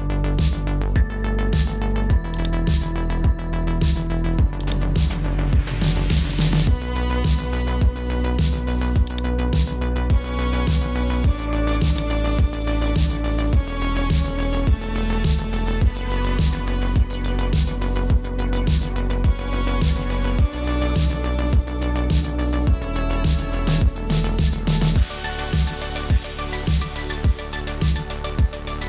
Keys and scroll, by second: 5.1 typing, 7.4 super+t, 14.8 Return.